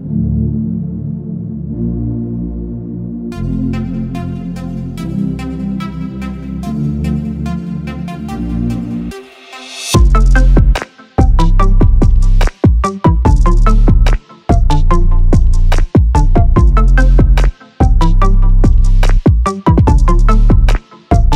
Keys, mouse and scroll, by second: 0.1-1.2 drag, 2.1-3.2 drag, 4.0-5.2 scroll up 1, 5.2 click, 6.4 click, 6.9 click, 7.3-9.2 right drag, 9.4 click, 9.6-11.3 right drag, 11.3 click, 11.6 click, 13.0 shift+click, 14.4 shift+click, 15.6 f, 16.0 click, 16.6 click, 17.6 click, 18.1 scroll up 2, 18.3 click, 18.8-19.1 scroll down 1, 19.1 click, 20.0 click, 20.4-20.8 scroll up 2.